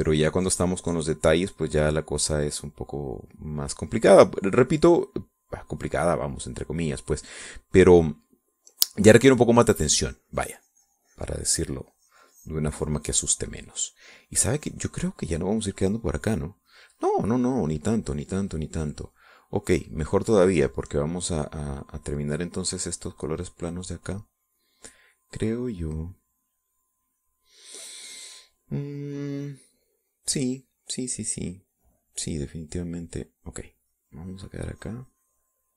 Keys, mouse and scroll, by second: 7.2-10.6 middle drag, 10.6-16.5 drag, 17.2 click, 17.9 click, 18.5 middle click, 19.3-20.8 scroll down 2, 19.3 middle click, 20.8-23.4 scroll down 1, 23.4-26.0 drag, 34.6-35.7 drag.